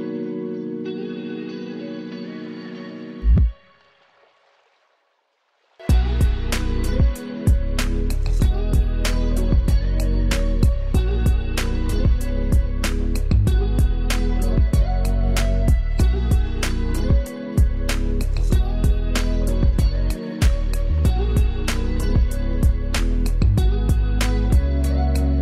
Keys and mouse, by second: 6.2-11.8 drag, 15.7 click, 24.8 click.